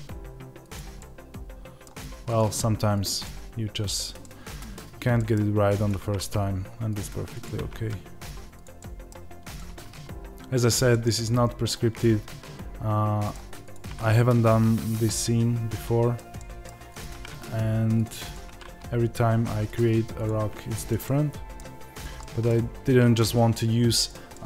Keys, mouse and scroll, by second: 0.9-2.2 middle drag, 2.2 click, 2.3 g, 3.1-5.8 middle drag, 5.8 click, 6.9 click, 7.5 g, 8.7 middle click, 9.4 click, 10.8-13.6 middle drag, 13.6 click, 15.0-16.9 middle drag, 16.9 click, 20.3 g, 20.9 middle click, 21.9 click, 22.1-24.4 middle drag, 22.7 g.